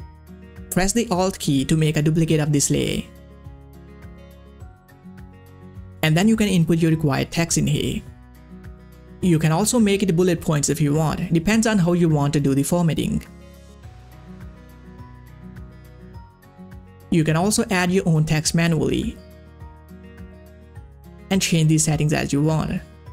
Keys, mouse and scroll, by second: 4.2 click, 8.0 ctrl+a, 8.3 ctrl+v, 9.1 ctrl+a, 10.1 click, 14.5 Return, 15.5 click, 18.1 click, 18.2 click, 19.8 click, 20.0-22.3 shift+drag, 22.9-23.1 drag.